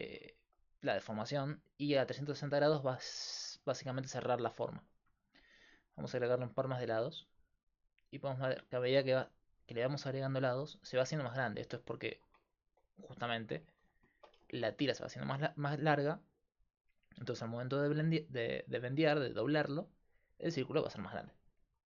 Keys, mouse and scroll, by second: 3.6-6.2 middle drag, 6.2-13.5 drag, 7.6-8.6 right drag, 12.1-21.8 middle drag, 12.1-13.5 right drag, 13.9-21.8 drag, 13.9-21.8 right drag.